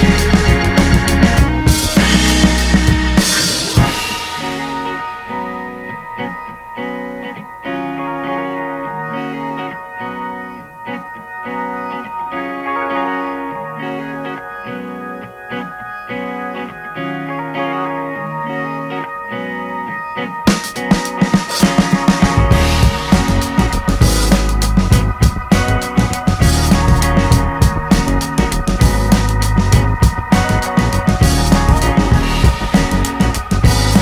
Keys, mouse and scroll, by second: 2.7-4.0 middle drag, 4.0 scroll down 1, 4.2 shift+middle click, 4.8 scroll up 1, 4.9-6.3 middle drag, 6.3 g, 6.8-8.9 middle drag, 8.9 s, 11.2 middle click, 12.0 scroll down 2, 12.1 middle click, 13.0 s, 14.4 middle click, 15.2 scroll up 2, 15.4 shift+middle click, 16.1 ctrl+a, 17.3 click, 18.0 middle click, 18.2-18.9 scroll up 2, 18.4 shift+middle click, 18.9 Tab, 20.2 middle click, 20.5 ctrl+r, 21.3 middle click, 22.0 scroll down 1, 22.1 shift+middle click, 22.6 Tab, 22.8 middle click, 22.9 Tab, 23.8-25.6 middle drag, 26.8-28.3 drag, 28.3 middle click, 28.6 Tab, 29.3 click, 29.8 scroll down 1, 30.0 shift+middle click, 30.2 scroll up 2, 30.4 a, 30.9 u, 31.7-33.6 drag, 33.8-34.0 drag.